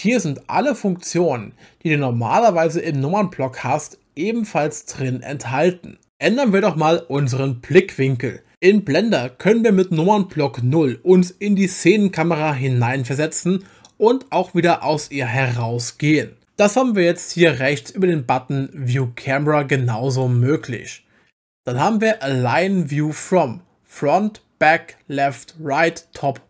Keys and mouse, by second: 12.7 KP_0, 14.9 KP_0, 18.9 click, 20.1 click.